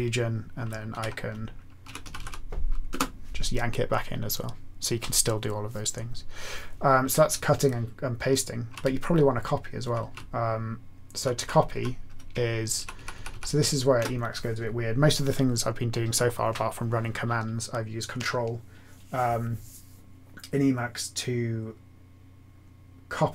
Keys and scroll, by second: 0.9 alt+x, 1.6-2.6 typing, 2.8 Return, 7.2-13.4 typing, 8.8-9.8 Left, 9.9 Right, 10.1-11.2 Left.